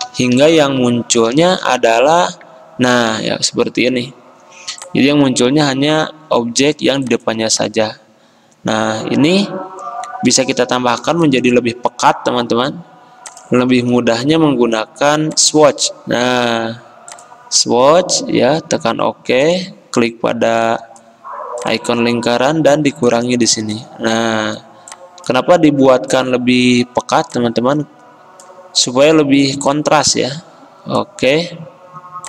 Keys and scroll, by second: 5.0 ctrl+].